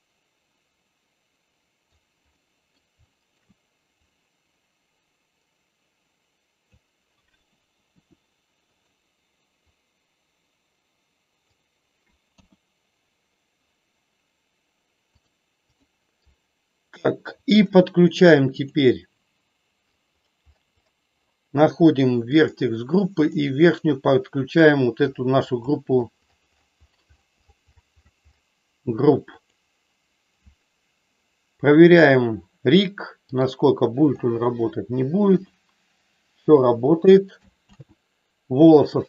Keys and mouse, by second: 2.3 middle click, 3.1 shift+middle click, 4.0-6.8 drag, 8.0 f, 9.7-11.6 drag, 12.2 KP_1, 15.1 click, 18.6 click, 22.3 click, 23.1-29.6 drag, 31.8 click, 33.3 click, 35.5 r, 36.5 click, 37.7 ctrl+z.